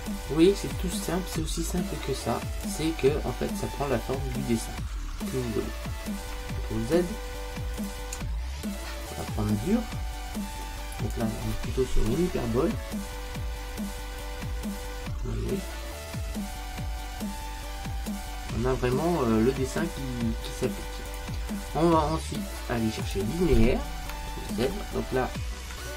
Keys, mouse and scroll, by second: 6.8 ctrl+z, 7.8 click, 10.7 click, 21.2 click, 24.7 ctrl+z.